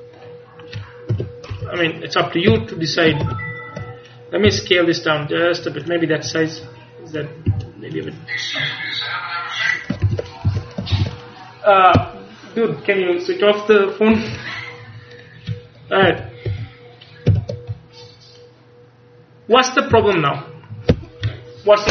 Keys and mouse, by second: 0.2-1.6 drag, 1.2 KP_1, 1.6 KP_3, 2.6 KP_1, 3.3 ctrl+KP_1, 4.5 s, 5.9 click, 7.6 s, 10.1 ctrl+s, 10.5 a, 11.0 ctrl+s, 15.2-16.2 middle drag, 16.2 ctrl+KP_3, 16.5 ctrl+KP_1, 17.4 ctrl+KP_3, 20.2 a.